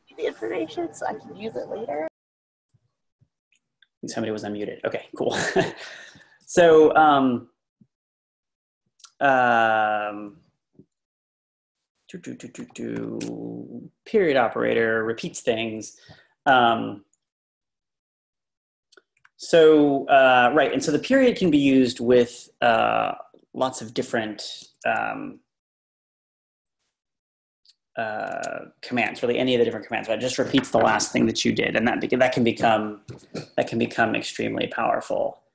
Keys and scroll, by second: 12.6 Up, 12.9 Up, 19.2 Up.